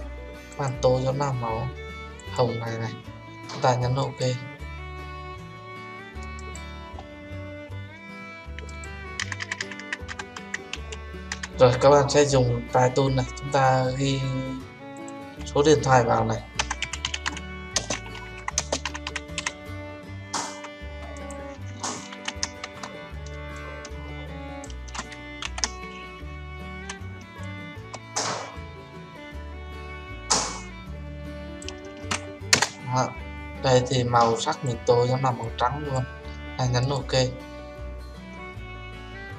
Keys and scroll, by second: 22.1 ctrl+t, 25.6 ctrl+z, 32.5 Return.